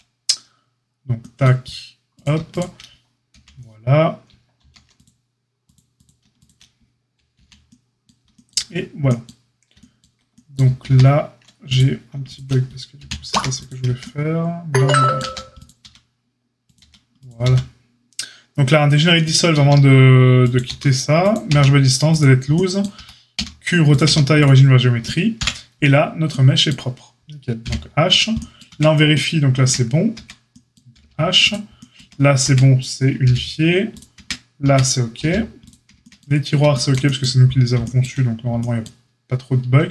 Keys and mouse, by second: 2.4 shift+click, 2.4 shift+middle click, 3.3 j, 4.5 ctrl+r, 6.3 click, 6.3 middle click, 7.3 j, 10.8 ctrl+z, 11.7-12.1 drag, 12.2 shift+click, 12.9 j, 13.3 a, 15.2 a, 15.8 q, 16.7 q, 17.4 q, 19.5 q, 20.6 q, 21.4 q, 22.9 Tab, 23.3 q, 24.0 q, 25.3 KP_Divide, 26.2-30.1 middle drag, 27.6 h, 28.0 click, 28.6 Tab, 30.1 Tab, 31.0 h, 31.9 Tab, 32.4 Tab, 33.2 h, 33.9 click, 33.9 middle click, 34.1 Tab, 34.6 Tab, 35.2 h, 35.6 click, 35.6-38.6 middle drag, 35.9 Tab, 39.7 Tab.